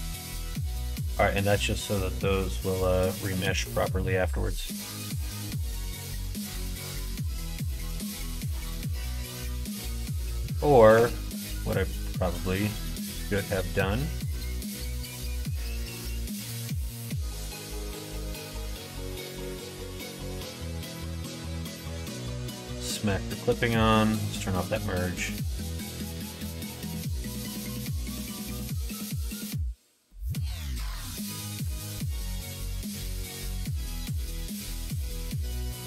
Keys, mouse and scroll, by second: 1.2 middle click, 1.8 shift+middle click, 2.6 middle click, 3.2 Tab, 3.7 middle click, 4.6 middle click, 5.3 middle click, 5.8 middle click, 6.2-9.6 middle drag, 10.0 middle click, 10.5 ctrl+z, 10.8 ctrl+z, 11.0 ctrl+z, 11.2 ctrl+z, 11.6 middle click, 12.8-16.7 middle drag, 17.1 middle click, 17.5 ctrl+z, 17.7 ctrl+z, 17.9 ctrl+z, 18.4 ctrl+z, 18.5 ctrl+z, 18.9 ctrl+z, 19.4 middle click, 22.3 click, 24.3 click, 25.0 middle click, 25.5 e, 27.2 middle click, 28.2 middle click, 28.6 middle click, 29.5 middle click, 30.1 middle click, 31.1 alt+click, 31.8 middle click, 33.6 click, 34.4 middle click, 35.4 shift+click.